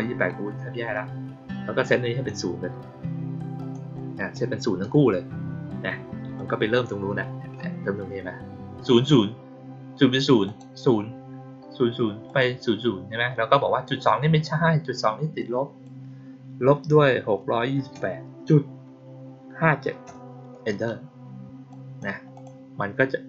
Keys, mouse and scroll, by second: 1.8 click, 3.5 click, 3.9 click, 6.3-6.6 drag, 10.4 click, 12.2 click, 15.3 click, 21.6-21.9 drag, 22.2 click.